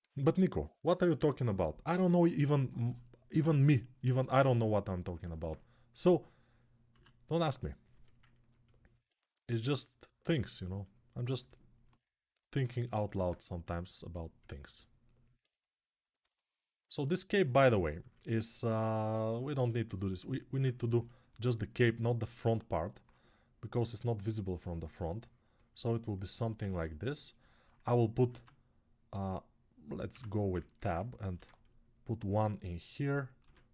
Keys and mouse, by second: 3.8 ctrl+Tab, 6.1-9.1 middle drag, 6.7 q, 9.1-27.4 drag, 27.4-29.1 right drag, 28.1 ctrl+Tab, 29.1-33.7 middle drag, 29.8 Tab, 31.1 ctrl+r, 33.2 ctrl+r.